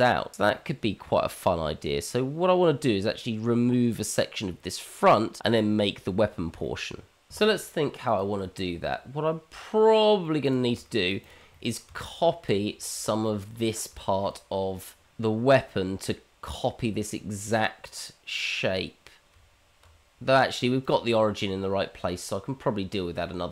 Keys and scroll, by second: 10.8 Tab, 19.3 Tab.